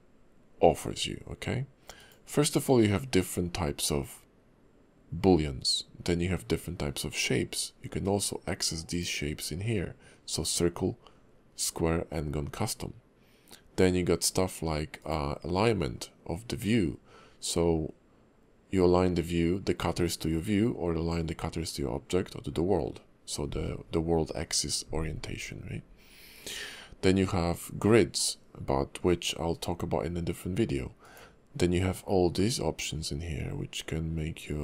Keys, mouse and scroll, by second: 2.0 click, 8.9 click, 15.0 click, 31.0 click.